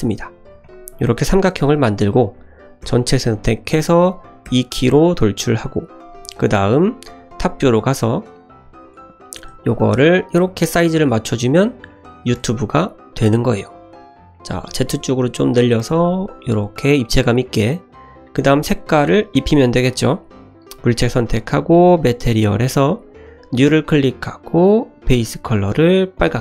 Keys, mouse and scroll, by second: 3.3 middle click, 4.4 e, 6.3 Tab, 7.0 `, 7.8 shift+middle drag, 8.4 click, 8.8 click, 9.4 s, 10.3 g, 11.8-12.2 middle drag, 12.3 g, 13.8-14.2 scroll up 3, 14.3 middle click, 14.6 s, 15.8 g, 17.4 middle drag, 17.8-18.4 scroll down 3, 18.4 click, 18.8 click, 20.1 click, 20.7 click, 21.9 click, 23.5 click, 25.0 click.